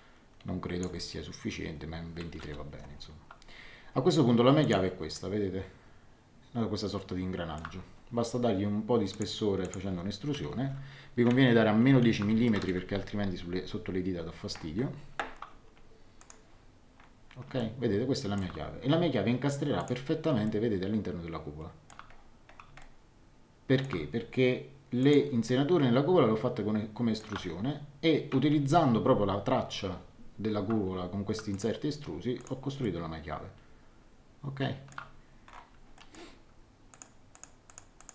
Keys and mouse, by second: 2.4 Return, 2.4 KP_Enter, 4.6 click, 9.1 click, 10.6 KP_1, 10.6 KP_0, 12.0 shift+Home, 12.3 KP_Subtract, 12.5 KP_1, 12.6 KP_0, 16.2 click, 17.5 shift+middle click, 19.8 click, 20.4 shift+middle click, 22.8 shift+middle click, 25.0 click, 25.4 shift+middle click, 31.5 click, 32.8 middle click, 35.9 middle click, 36.9 click.